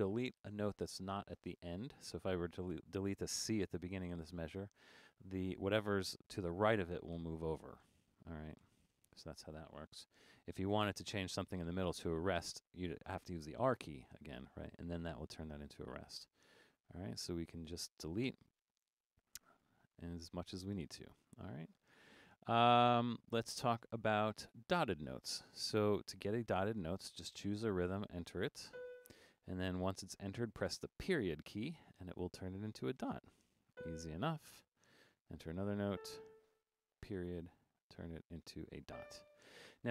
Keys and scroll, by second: 1.6 Left, 2.2 Left, 7.2 BackSpace, 8.6 BackSpace, 10.0 BackSpace, 10.4 Left, 10.6 Left, 10.9 Left, 11.1 Left, 11.4 Left, 11.6 Left, 13.7 r, 16.0 Right, 16.2 Right, 16.4 Right, 16.7 Right, 17.1 Right, 17.7-20.7 typing, 26.9 5, 31.1 ., 34.9 5, 37.1 ..